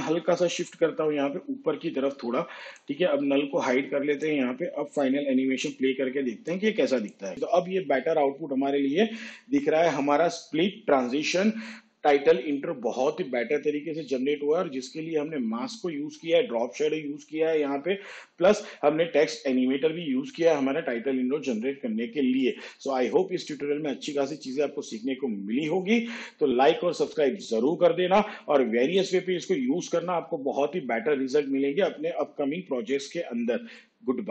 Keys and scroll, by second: 0.2 p.